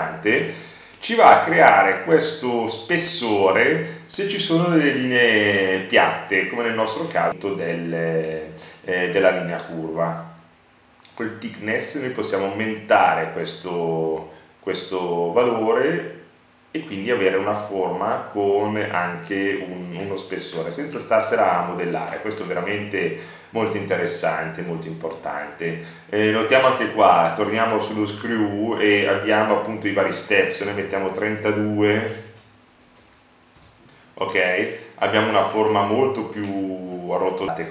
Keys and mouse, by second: 8.0 middle click, 15.1-17.5 middle drag, 20.5 BackSpace, 26.1-27.4 middle drag, 30.5 middle click, 30.9-34.3 drag, 35.4 click.